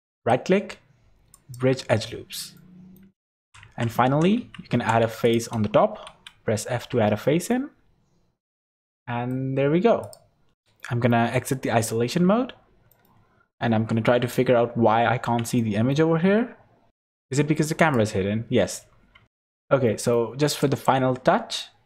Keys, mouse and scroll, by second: 0.1 right click, 2.6 middle click, 3.0 Tab, 3.5 2, 3.6 Tab, 4.0 3, 4.4 alt+a, 4.7 2, 5.2 alt+shift+click, 6.1 f, 6.8 Tab, 7.5 middle click, 9.6 scroll down 5, 10.0 click, 10.5 scroll down 1, 10.8 middle click, 11.5 /, 12.5 scroll down 2, 12.9 middle click, 13.2 scroll down 3, 14.2 KP_0, 14.9-15.6 scroll down 4, 15.6 shift+middle click, 16.4-16.9 scroll up 3, 16.9 click, 17.8 click, 19.2 shift+middle click, 19.2 click, 19.2-19.7 scroll up 11, 19.9 shift+middle click, 20.5 click, 20.8 middle click.